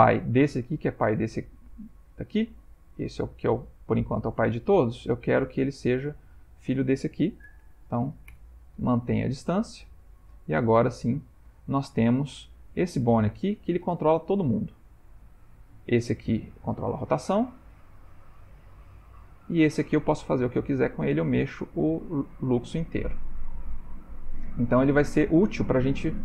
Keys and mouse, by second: 2.6 click, 3.2 g, 6.2 shift+click, 7.4 ctrl+p, 9.3 ctrl+middle click, 9.6 ctrl+middle click, 9.6 ctrl+middle click, 11.1 shift+click, 11.7 ctrl+middle click, 11.9 ctrl+middle click, 12.3 Tab, 12.8 click, 13.4 ctrl+middle click, 14.1 g, 16.1 click, 16.6 r, 18.2 click, 18.4 r, 19.8 click, 20.3 g, 22.8-24.7 ctrl+middle click, 23.5-24.1 middle click, 23.6 middle click, 24.7 g.